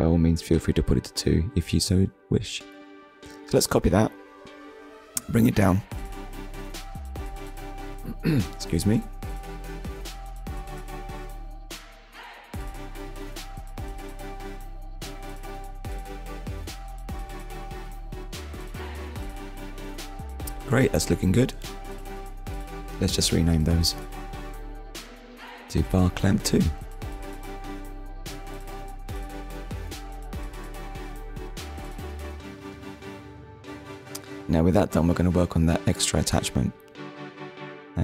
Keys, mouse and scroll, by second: 0.7 shift+d, 1.5 right click, 3.3 click, 10.5-10.8 scroll up 1, 11.0 shift+middle click, 12.4 click, 17.2 scroll down 1, 17.9 middle click, 19.7 shift+middle click, 20.4 click, 21.4 click, 22.4 click, 22.9 click, 23.3 click, 24.6 2, 24.7 Return, 25.8 click, 26.3 middle click, 27.3 ctrl+s, 30.0 click, 31.3 middle click, 32.3 KP_1, 34.3 middle click, 35.5 middle click, 36.3 shift+a, 37.9 click.